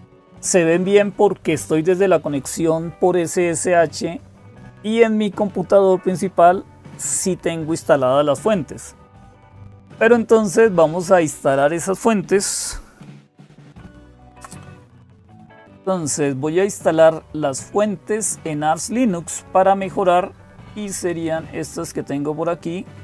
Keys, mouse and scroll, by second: 0.0-23.0 typing, 11.0 click, 13.9 ctrl+x, 15.6 super+c, 15.6-21.7 scroll down 1, 21.7-23.0 drag.